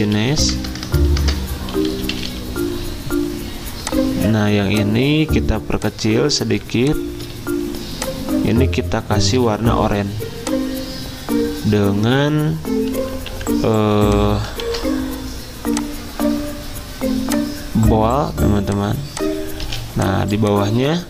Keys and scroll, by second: 0.0-3.4 typing, 9.4 i, 13.3 t, 14.6 ctrl+a, 19.6 z.